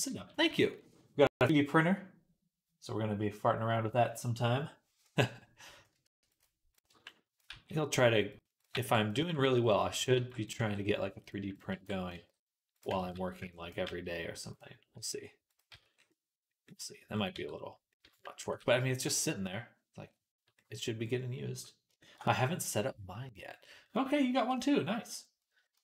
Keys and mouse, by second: 5.9 ctrl+r, 6.3-14.8 middle drag, 6.7 b, 7.3 g, 8.6 b, 9.0 g, 9.8 click, 10.0 b, 10.4 g, 11.4 click, 11.6 b, 12.0 g, 12.9 ctrl+z, 13.2 b, 13.7 g, 14.8-17.2 drag, 14.8 r, 15.5 z, 17.2 Tab, 17.2-25.8 middle drag, 18.3 ctrl+s, 25.6 Tab.